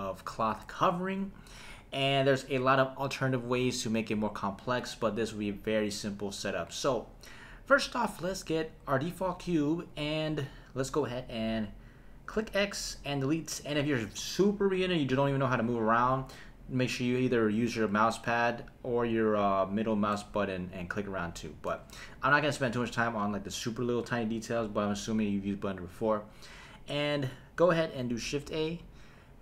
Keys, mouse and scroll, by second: 6.1 click, 12.3 x, 20.1-22.0 middle drag, 28.4 shift+a.